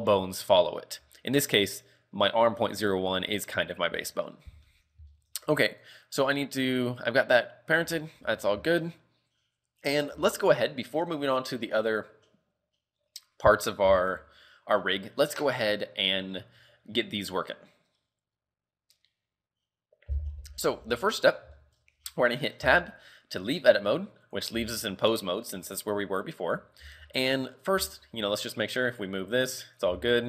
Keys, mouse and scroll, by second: 1.5 right click, 4.1 shift+middle click, 4.4 scroll up 2, 4.8 shift+middle click, 5.2 shift+middle click, 5.5 a, 5.9 right click, 7.7 scroll down 4, 8.0 shift+middle click, 8.3 scroll up 3, 8.3 a, 8.8 shift+middle click, 9.9 scroll up 1, 10.3 shift+middle click, 10.7-11.4 scroll down 1, 11.4 scroll down 2, 21.3-21.6 scroll up 2, 21.6 shift+middle click, 22.7 Tab, 23.9 right click, 24.3 right click, 24.6 z, 24.7 scroll down 3, 25.1 middle click, 25.7 middle click, 26.2-26.5 scroll up 3, 26.5 KP_3, 26.9 z, 27.1 shift+middle click, 27.6 scroll down 3, 27.8 z, 28.2 r, 30.0 z, 30.0-30.2 scroll up 3.